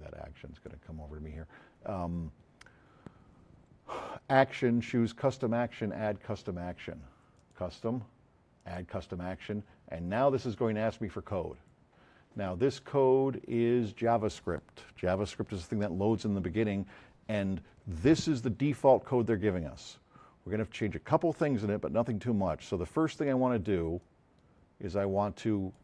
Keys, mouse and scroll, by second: 7.4 click, 8.6 click, 10.5 click, 24.0-25.2 drag.